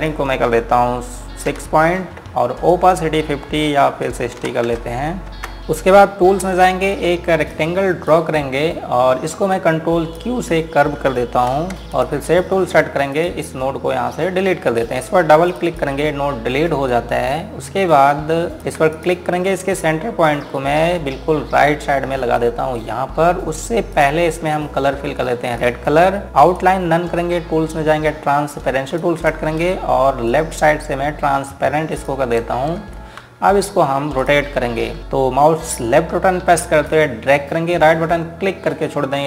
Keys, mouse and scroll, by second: 2.2 KP_6, 3.5 click, 5.2 KP_6, 5.6 click, 6.6 scroll up 1, 8.1 click, 11.3 scroll up 1, 11.8 q, 12.6 click, 19.3 space, 19.7 click, 27.1 right click, 29.7 click, 31.1 ctrl+click, 33.6 ctrl+space, 34.9 click, 37.3 ctrl+Num_Lock, 37.7 ctrl+click, 38.6 ctrl+right click.